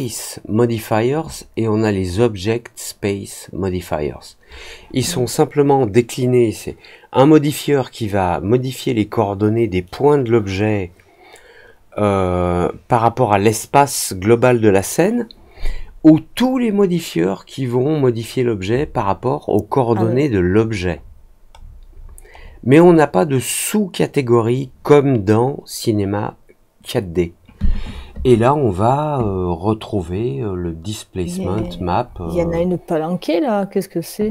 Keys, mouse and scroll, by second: 16.8-17.8 scroll down 4, 20.9 scroll down 1, 21.5 scroll down 1, 21.6 scroll up 1, 21.9-23.0 scroll down 3, 31.5 middle click, 32.0 middle click, 32.3 middle click.